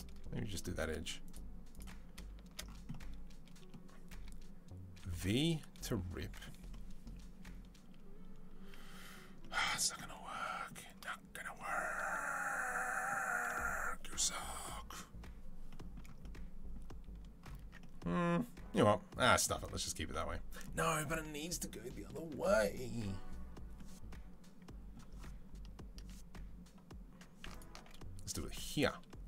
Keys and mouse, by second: 1.1 alt+click, 1.2 alt+middle click, 1.5 alt+click, 1.6 alt+middle click, 2.1 alt+shift+click, 2.4-20.4 middle drag, 4.9 v, 17.5 Tab, 25.8 Tab, 27.4 alt+click.